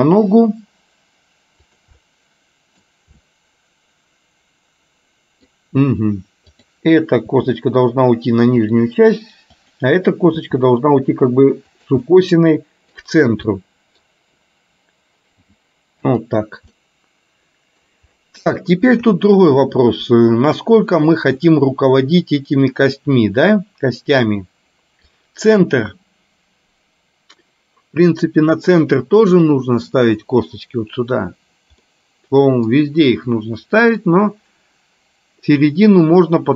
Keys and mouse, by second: 0.1 e, 2.2 middle click, 3.2-5.6 middle drag, 7.4 e, 10.6 e, 12.2 middle click, 13.7 middle click, 15.6 g, 16.9-17.9 middle drag, 18.7 shift+middle click, 21.7-25.2 middle drag, 31.9 middle click, 33.2 middle click.